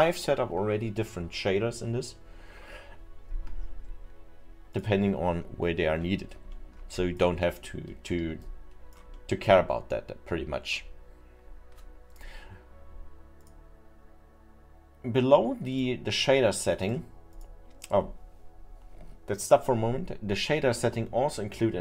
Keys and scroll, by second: 8.2 alt+8.